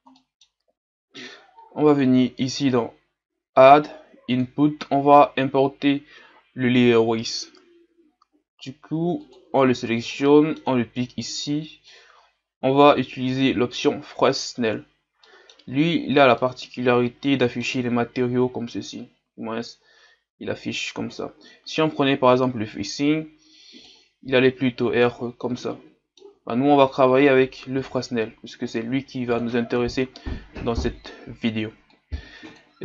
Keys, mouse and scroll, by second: 13.5-15.2 drag, 15.2 middle click, 15.6-16.4 scroll up 2, 16.4-24.1 middle drag, 24.1 click, 25.0-29.4 middle drag, 29.4 click.